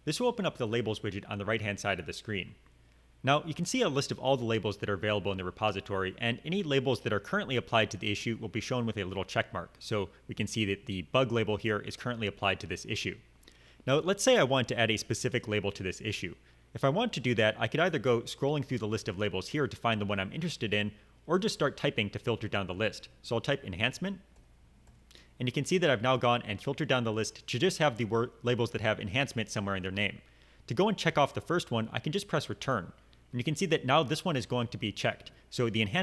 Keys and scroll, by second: 23.6-24.8 typing, 32.6 Return.